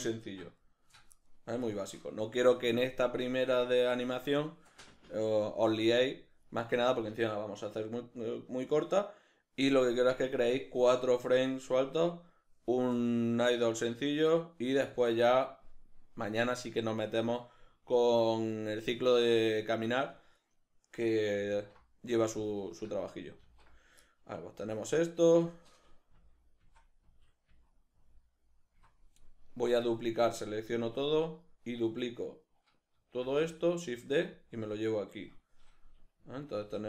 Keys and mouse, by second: 0.6-21.5 shift+middle drag, 21.5 alt+q, 24.1 shift+middle click, 24.6 alt+q, 26.2 Left, 26.6 Right, 27.0 Left, 27.5 Right, 28.0 Left, 28.8 Right, 29.4 right click, 30.4 a, 31.3 right click, 33.2 shift+d, 34.4 click, 36.2 Left, 36.6 Right.